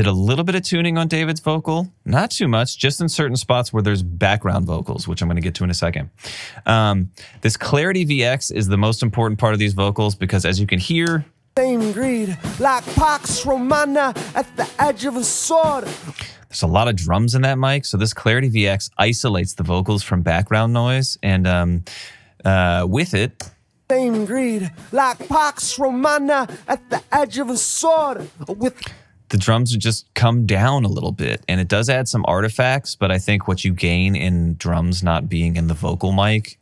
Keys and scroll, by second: 11.1 space, 15.9 space, 23.4 space, 27.2 alt+super+w, 28.4 space.